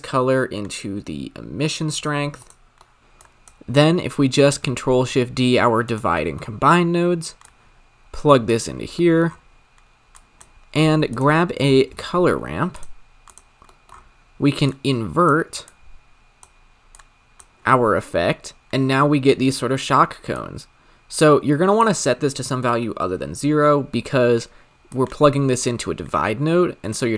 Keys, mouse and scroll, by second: 2.4 click, 2.9 middle click, 3.0-3.4 drag, 4.9 ctrl+shift+d, 6.4 middle click, 6.5-7.4 scroll up 7, 7.4 click, 8.7 scroll down 5, 9.0 middle click, 9.3-10.1 scroll up 7, 10.1 click, 11.1 g, 11.7 shift+a, 13.7 middle click, 13.9-14.7 scroll up 6, 14.7-17.6 drag, 17.6-19.3 scroll up 7, 20.4-23.6 drag, 24.0 middle click, 24.8 click.